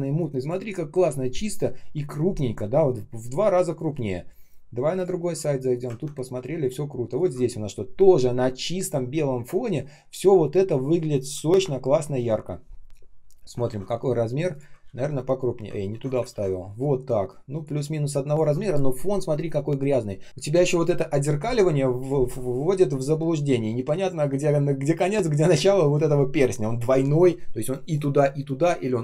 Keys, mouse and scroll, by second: 5.8 ctrl+ц, 13.5 ctrl+c, 14.7 ctrl+м, 15.7 ctrl+я, 16.2 ctrl+м.